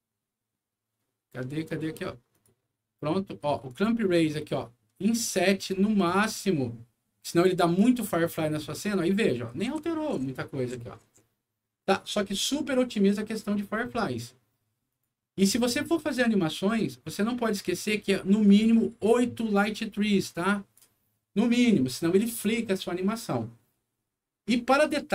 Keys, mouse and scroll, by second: 2.3 click, 3.7-7.4 drag, 8.9-10.7 typing, 9.0-12.0 right drag, 14.9 click, 18.4-20.7 drag, 24.9 right click.